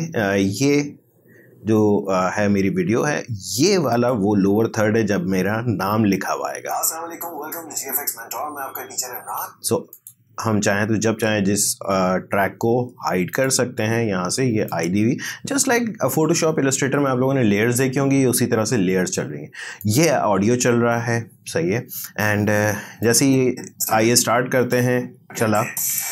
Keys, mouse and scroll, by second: 3.9 click, 6.5 space, 9.2 space, 9.9 click, 13.3 click, 19.8 click, 23.0-24.9 drag, 24.9 space.